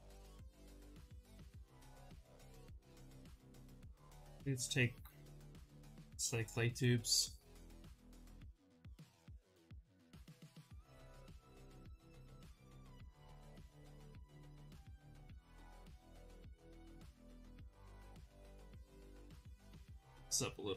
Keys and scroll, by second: 1.6 ctrl+z, 2.8 b, 7.5 s, 8.0 space, 11.4 ctrl+z, 11.5 ctrl+z.